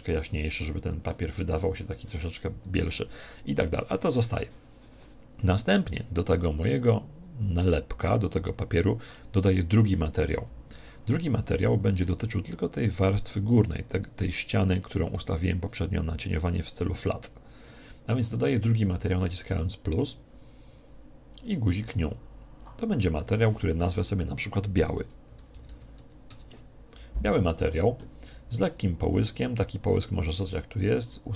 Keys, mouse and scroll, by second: 2.9-4.6 middle drag, 6.6-8.3 middle drag, 8.5-11.0 middle drag, 19.4 click, 21.2-24.1 drag, 31.0 click.